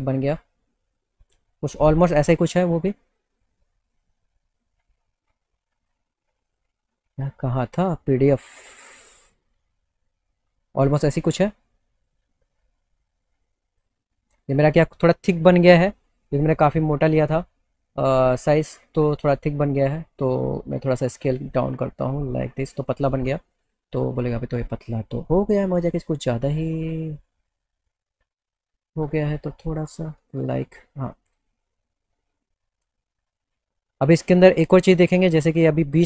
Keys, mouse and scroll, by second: 8.8 click, 9.5 click, 13.8 click, 15.5 click, 20.2 click, 21.6-23.0 drag, 23.2 alt+middle click, 24.7 alt+middle click, 26.7 alt+middle click, 29.7-30.9 drag, 31.2 click, 33.3 click.